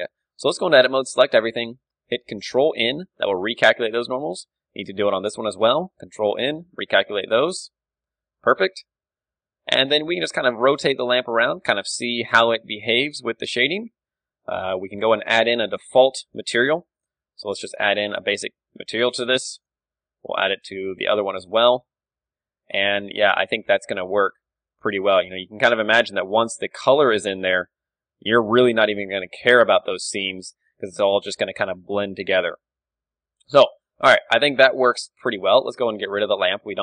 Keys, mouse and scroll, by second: 0.5 Tab, 1.0 a, 1.3-2.4 middle drag, 1.8 a, 2.5 ctrl+n, 3.2 Tab, 4.2-5.9 right drag, 4.7 Tab, 4.9 a, 5.2 a, 6.1 ctrl+n, 6.6 Tab, 6.7 middle click, 7.2 a, 7.4-12.9 middle drag, 8.5 KP_1, 10.0-11.7 right drag, 10.5 r, 13.6-15.0 right drag, 15.3-18.9 drag, 18.9 middle click, 18.9 z, 19.3 z, 19.7-20.7 right drag, 21.4-22.7 drag, 21.8 alt+z, 22.7 middle click, 22.7 a, 23.2-24.8 right drag, 23.9 r, 24.8 g, 25.0-27.4 drag, 25.5 r, 26.3 a, 28.1 a, 29.1-35.6 middle drag, 36.0 x, 36.2-36.8 right drag, 36.6 KP_1.